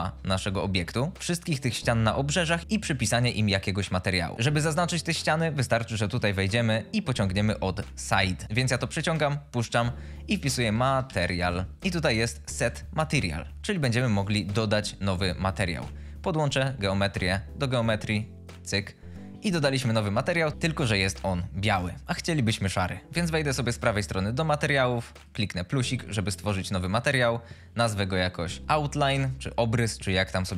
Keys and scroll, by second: 10.8-11.4 typing, 12.5 Return, 28.6 e, 29.1 Return.